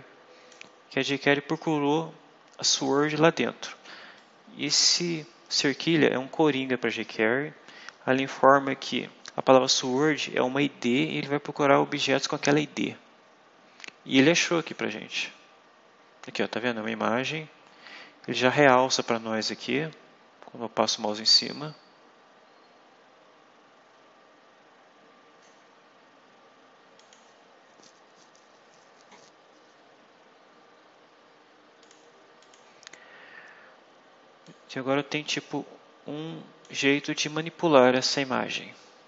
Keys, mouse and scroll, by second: 2.7 click, 4.1-5.2 drag, 14.5 click, 26.9 click, 31.7 click, 32.3 click, 33.2 scroll up 2, 34.3-36.7 drag.